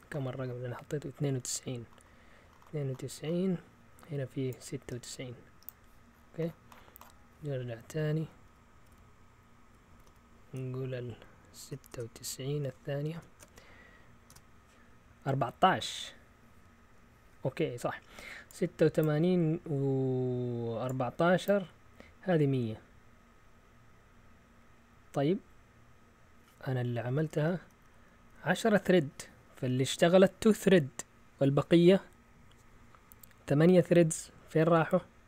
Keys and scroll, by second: 8.7 Left, 8.9 Left, 9.5-11.3 typing, 9.5 Left, 9.6 Left, 9.7 Left, 9.9 Right, 13.1 ctrl+shift+Insert, 14.3 Return, 27.3 Up, 27.7 Up, 27.9 Up, 28.3 Down.